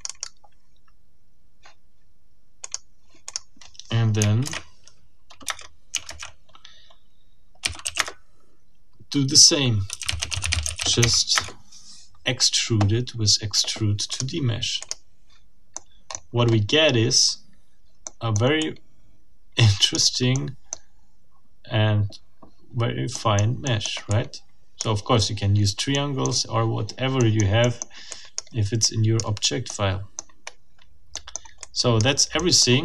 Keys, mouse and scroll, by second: 2.6 click, 3.3 click, 4.4 shift+1, 5.4 shift+Return, 5.9 shift+Return, 6.1 shift+1, 7.4-8.4 typing, 9.7-11.3 typing, 11.3 Return, 14.1 click, 14.8 click, 15.7 middle click, 16.1-17.1 scroll up 4, 17.5-18.1 scroll down 2, 18.1 click, 19.7 click, 20.3-20.9 drag, 23.1 click, 23.7 click, 24.8 click, 25.9 right click, 26.5-27.2 scroll up 1, 27.2 right click, 27.6-28.1 scroll up 1, 28.1-28.5 drag, 28.8 middle click, 29.4 scroll down 2, 29.7 middle click, 30.2-30.7 scroll up 2, 30.7 scroll down 2, 31.1 middle click, 31.6-32.2 drag, 32.3 middle click.